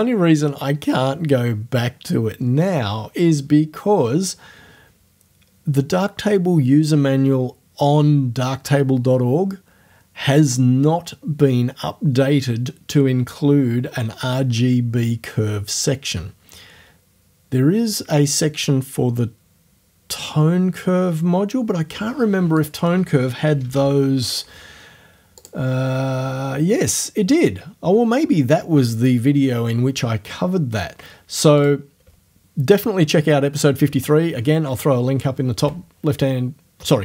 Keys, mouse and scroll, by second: 22.6 click, 23.3-24.2 typing, 25.4 click, 25.7-29.6 scroll up 1, 31.6 click.